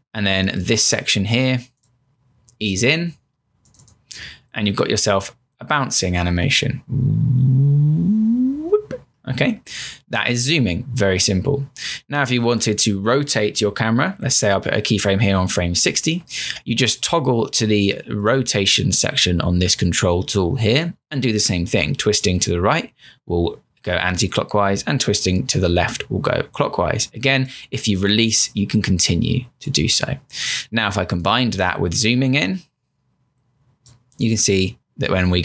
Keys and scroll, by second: 4.7 Return, 7.1 Return, 9.2 Return, 14.8 F6.